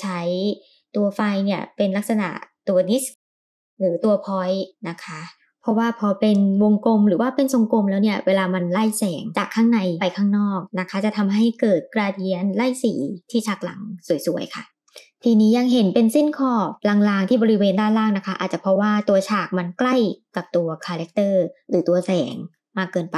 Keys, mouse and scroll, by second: 3.1 click, 4.2 g, 9.3-9.8 middle drag, 9.9 scroll down 2, 10.2-10.6 middle drag, 10.6 g, 17.8 middle click, 18.8-19.4 drag.